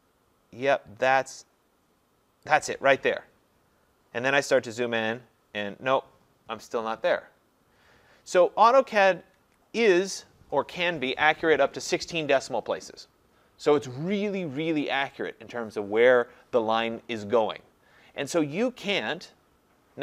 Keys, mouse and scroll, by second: 2.6 click, 4.4-5.2 scroll, 5.4-7.6 scroll, 8.6-9.4 scroll, 9.4 Escape, 9.9 scroll, 13.8 scroll.